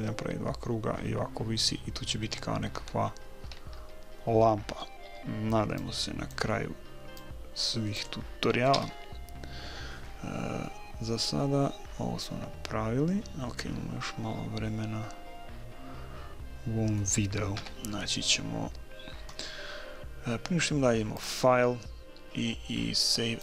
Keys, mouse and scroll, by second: 5.1 b, 7.2-9.1 drag, 8.8 a, 10.7-12.7 middle drag, 17.5 KP_1, 21.2-23.0 drag.